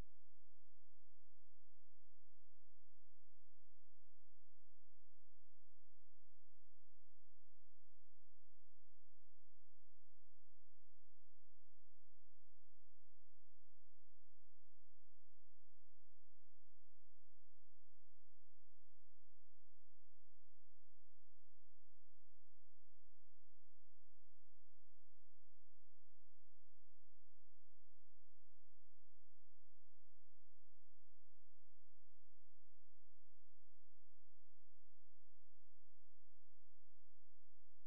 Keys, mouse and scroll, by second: 4.9-8.7 drag, 9.3-11.8 drag, 13.0 click, 15.2 click, 18.8 click, 27.8 click, 28.6 click, 30.9-33.0 drag, 33.0 click, 34.3 click, 35.0-37.8 drag.